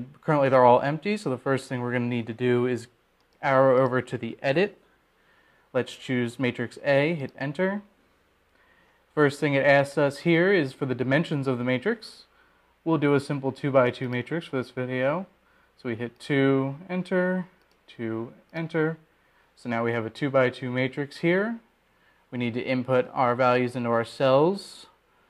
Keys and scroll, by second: 6.0 Right, 6.8 Right, 9.9 Return, 16.8 2, 19.0 Return, 20.4 2, 21.2 Return.